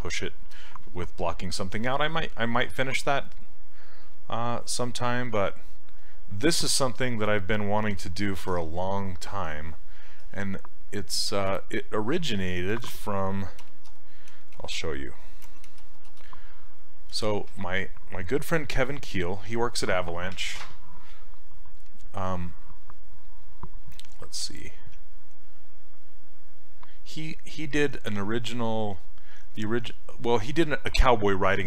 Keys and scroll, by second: 13.4-15.7 typing, 17.1 Return.